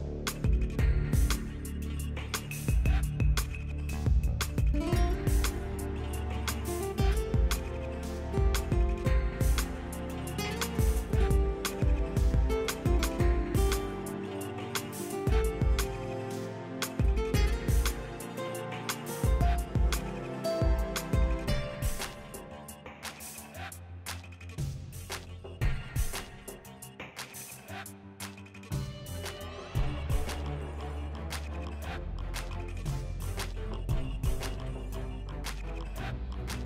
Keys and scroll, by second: 1.7 s, 2.4 s, 3.5 s, 9.5 s, 12.1 s, 14.1 s, 24.3-25.8 typing.